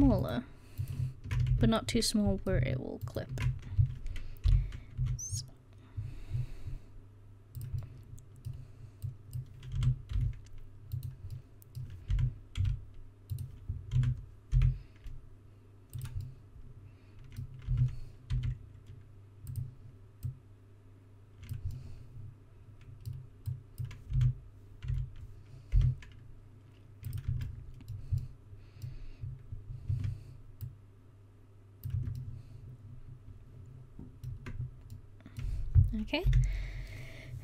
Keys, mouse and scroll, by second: 1.6 ctrl+z, 2.5 middle click, 3.1-4.5 middle drag, 4.5 o, 5.1 s, 9.1 click, 9.8 s, 11.0 click, 12.2 s, 14.0 s, 17.7 s, 20.3-21.8 drag, 21.9 middle click, 24.2 s, 27.3 Tab, 30.0 Tab, 30.7-31.9 drag, 32.0 Tab, 36.3 KP_1.